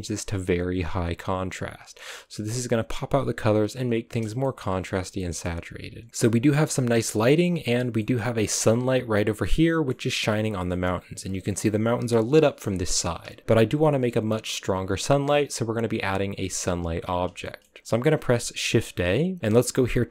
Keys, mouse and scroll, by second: 0.9-4.3 drag, 4.3-6.9 shift+middle drag, 6.9 scroll up 1, 7.1 middle click, 7.4 scroll down 1, 7.6-10.0 middle drag, 10.0-10.6 scroll up 3, 10.6-12.0 scroll up 2, 10.7 middle click, 12.0-12.9 scroll up 1, 12.9 KP_0, 17.3 shift+middle click, 18.0-18.6 scroll down 3, 18.6 shift+a.